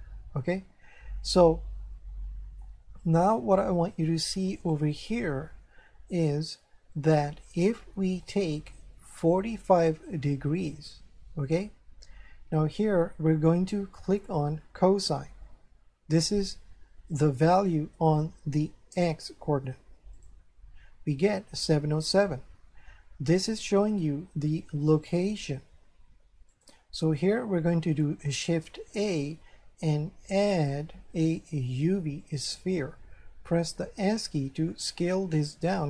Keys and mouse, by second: 1.2 shift+middle click, 4.6 click, 7.1 click, 9.2 click, 10.6 click, 20.2 click, 26.5 click, 28.9 shift+a, 32.2 click, 34.1 s.